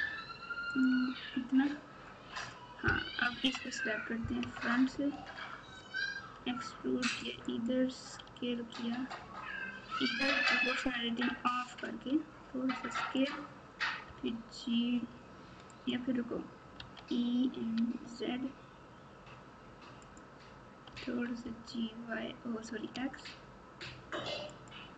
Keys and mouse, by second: 0.7 ctrl+click, 3.3 KP_3, 4.3 KP_1, 6.1 e, 8.2 s, 12.0 s, 14.0 g, 16.7 e, 20.9 g.